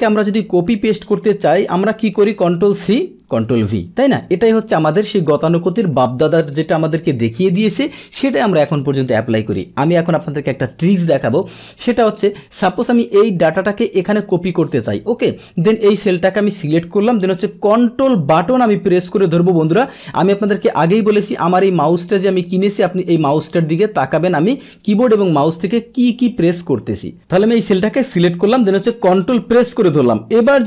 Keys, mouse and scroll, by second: 2.5 ctrl+c, 2.8 click, 2.9 ctrl+c, 3.4 ctrl+v, 4.2 click, 7.5 Delete, 9.3 click, 12.6 click, 14.2 click, 14.8 click, 22.5 click, 27.3 click.